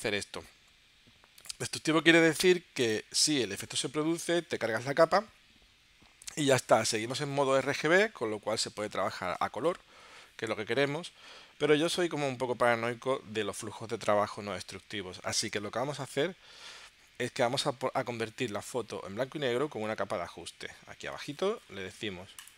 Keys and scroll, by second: 11.7 super+z.